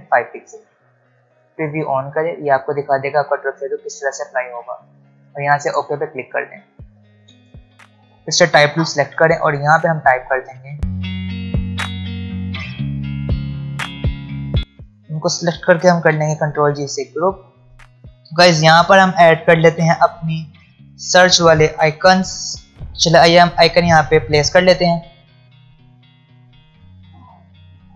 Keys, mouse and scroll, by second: 1.7 ctrl+alt+Num_Lock, 1.7-2.9 ctrl+alt+scroll down 2, 2.9-3.3 ctrl+alt+scroll down 1, 5.7-6.4 drag, 6.5-7.0 alt+scroll down 2, 7.0 space, 7.9 alt+scroll up 1, 8.8 t, 9.8 click, 10.6-12.6 typing, 11.4 shift+click, 11.8 Return, 12.2 click, 12.5 click, 12.8 click, 13.3 scroll down 2, 13.6 click, 13.7 alt+scroll up 1, 13.8 click, 14.3 alt+scroll down 1, 14.3 click, 14.4 alt+scroll up 1, 15.9 ctrl+g, 16.9 click, 17.9-20.5 drag, 22.7 click, 24.5-27.9 drag, 25.8 click.